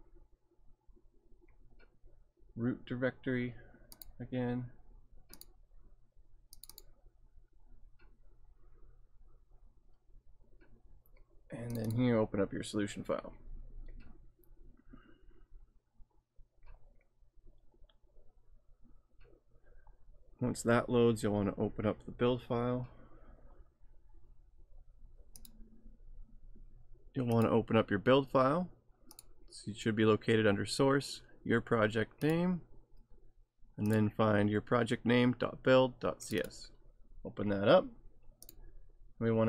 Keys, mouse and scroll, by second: 4.0 click, 11.7 click, 25.4 click, 27.4 click, 29.1 click, 32.2 click, 33.8 click, 36.3 click, 38.4 click.